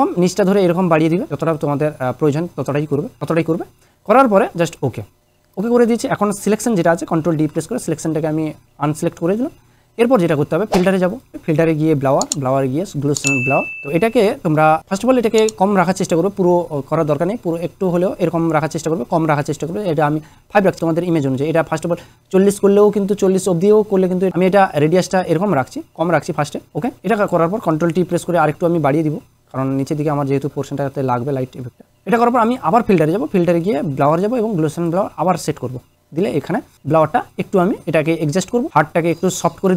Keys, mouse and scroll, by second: 3.1 click, 3.2 ctrl+z, 4.7 ctrl+z, 4.7 click, 7.3 ctrl+d, 11.1 click, 15.0-15.3 click, 23.7 drag, 28.0 ctrl+t, 29.9-31.0 drag, 37.8 click.